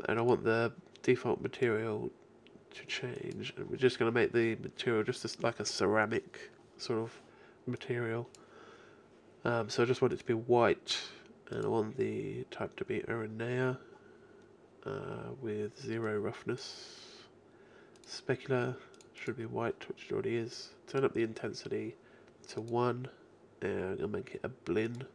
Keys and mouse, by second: 0.2-3.6 drag, 3.6-7.8 middle drag, 7.8-11.7 drag, 11.7-12.9 middle drag, 16.1-23.7 middle drag, 24.9 middle click.